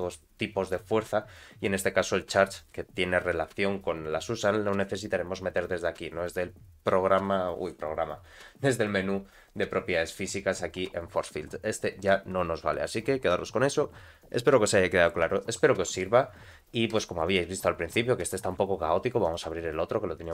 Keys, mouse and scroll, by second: 0.0-3.9 drag, 8.8 click, 17.3-20.3 drag.